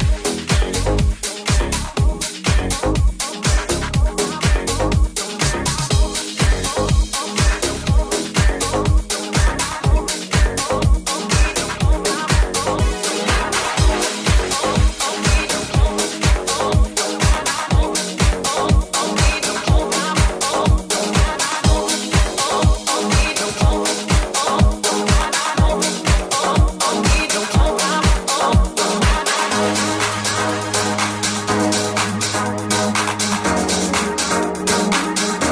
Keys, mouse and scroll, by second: 5.2-10.2 ctrl+shift+middle drag, 16.3 Tab, 17.4 Tab, 23.1-25.8 shift+middle drag, 23.1 f, 25.8-30.8 drag, 31.4-35.5 drag.